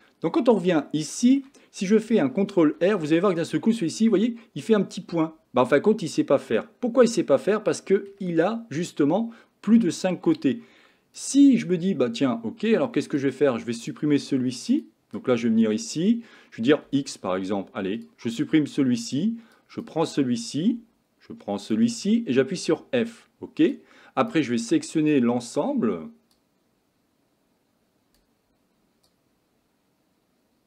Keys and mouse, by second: 0.8 shift+middle click, 2.8 ctrl+r, 10.4 click, 13.3 click, 14.8 click, 15.2 click, 16.9 x, 19.6 click, 21.7 shift+click, 22.6 f, 26.4-28.2 drag, 29.1-30.6 drag.